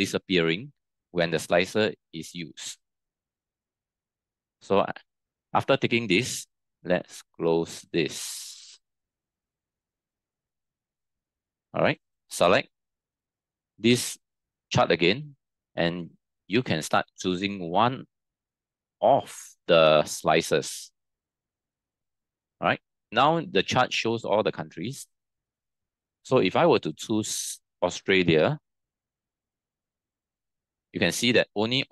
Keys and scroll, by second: 9.3 ctrl+t.